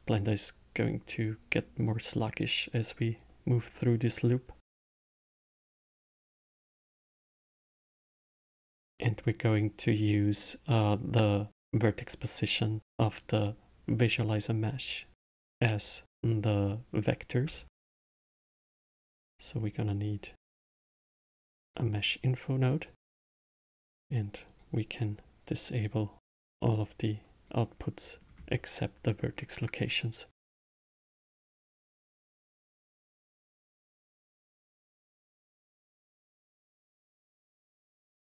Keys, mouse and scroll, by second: 1.1 click, 3.1 click, 5.9-8.6 middle drag, 8.6-9.8 scroll up 1, 10.3 click, 17.6 shift+a, 23.2 click, 24.4 click, 25.8-28.2 drag, 28.2-30.1 scroll up 2, 30.3 click, 31.9 click, 34.8 click, 35.9 click, 36.5-37.6 drag.